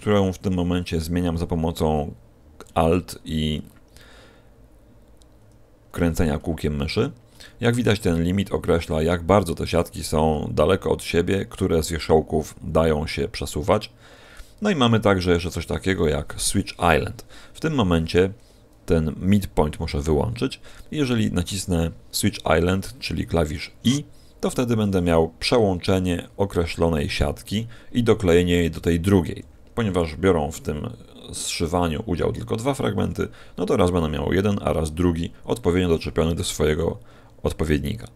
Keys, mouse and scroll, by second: 0.3-0.9 scroll up 4, 0.9-1.9 scroll down 6, 1.9 scroll up 1.